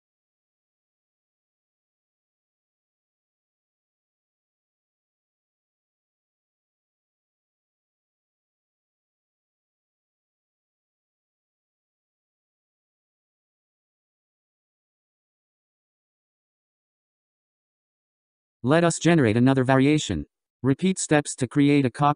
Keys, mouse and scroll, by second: 0.3-2.7 scroll down 4, 2.8-5.8 middle drag, 9.7-10.2 scroll up 1, 10.2-11.2 scroll down 1, 11.2-12.4 scroll down 10, 12.4-12.8 scroll up 3, 20.8 click.